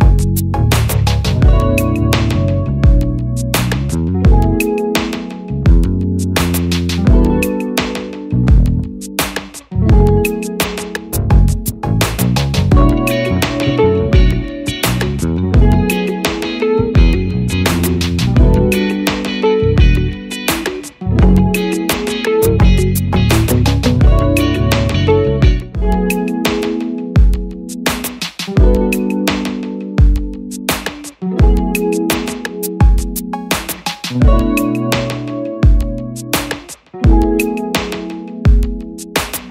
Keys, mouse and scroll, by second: 9.0 click, 35.8 double click.